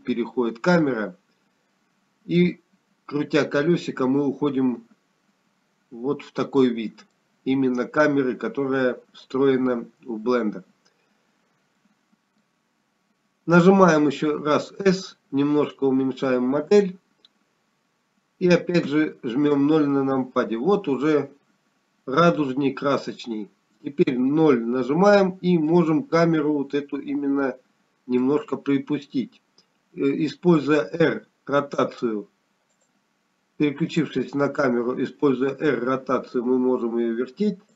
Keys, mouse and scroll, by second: 6.4 middle click, 6.4-8.0 scroll down 4, 12.1 Delete, 12.1 scroll up 2, 13.6 click, 13.6 middle click, 16.8 s, 23.4-24.1 scroll down 3, 23.4 KP_0, 27.1 KP_0, 31.3 middle click, 34.2 r, 36.8 click.